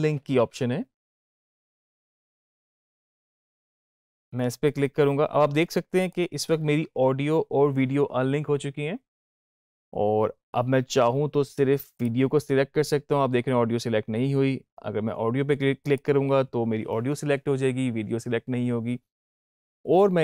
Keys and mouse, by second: 3.6 click, 5.9 click, 11.8 click, 12.3 click, 15.7 click.